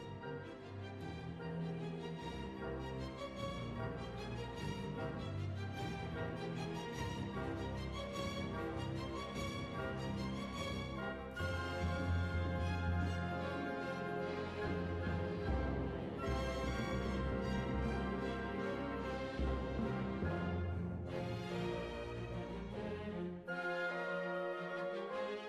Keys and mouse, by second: 1.3 click, 2.3 s, 8.6-9.8 drag, 10.4 KP_Divide, 11.7-12.7 drag, 13.2 KP_Divide, 14.7 Tab, 15.4 right click, 16.1 ctrl+j, 17.6-21.7 drag.